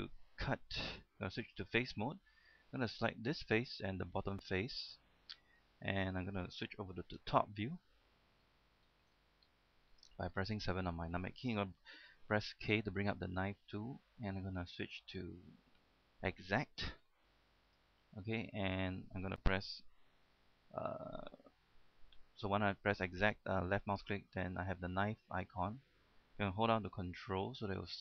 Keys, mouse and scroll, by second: 0.3 middle click, 1.0 ctrl+Tab, 1.6 click, 1.9 middle click, 3.4 right click, 4.4 shift+right click, 5.0 middle click, 7.4 KP_7, 8.6 scroll down 1, 9.4 shift+middle click, 9.7-10.5 scroll down 1, 10.5 shift+middle click, 10.9-12.5 scroll up 1, 12.9 k, 17.9-18.9 drag.